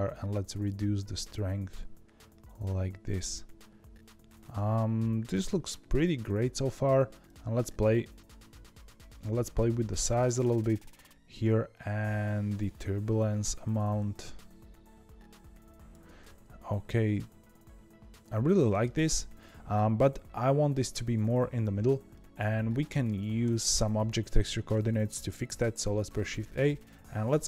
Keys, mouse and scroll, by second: 0.0-3.2 drag, 7.2-8.5 shift+drag, 8.5 ctrl+z, 9.5-13.7 shift+drag, 16.1-19.2 middle drag, 22.0-25.1 middle drag, 25.8 shift+a.